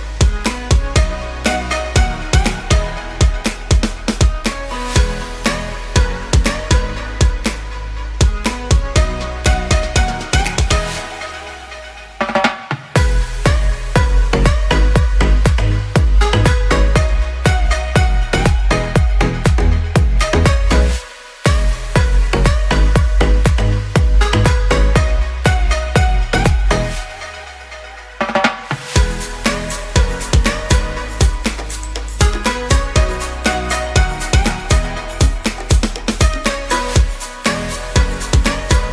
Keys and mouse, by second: 1.5 middle click, 2.7 click, 3.4 ctrl+click, 4.1 shift+click, 4.4 shift+click, 4.8 middle click, 5.4 shift+click, 6.0 shift+click, 6.9 ctrl+click, 7.3 ctrl+e, 7.7 a, 8.1 a, 8.4 u, 8.7 a, 9.2 shift+middle click, 10.3 shift+middle click, 12.5 click, 13.0 shift+click, 13.5 shift+click, 13.8 middle click, 14.9 shift+click, 15.2 ctrl+e, 16.6 a, 17.1 a, 17.7 u, 18.2 a, 19.1-21.3 middle drag, 22.1 ctrl+z, 23.6 click, 25.0 a, 25.3 ctrl+s, 25.7 shift+click, 26.2 ctrl+z, 26.9 a, 27.2 ctrl+s, 27.6 shift+click, 28.3 alt+h, 28.8 a, 29.3 a, 29.7 u, 30.0 a, 30.7 Tab, 33.0 h, 33.4-33.9 ctrl+shift+middle drag, 33.7 ctrl+s, 34.4 shift+middle drag, 35.0 click, 35.9 KP_Divide, 37.2 middle drag, 37.6 Tab, 37.9 shift+middle click, 38.4 a, 38.8 click.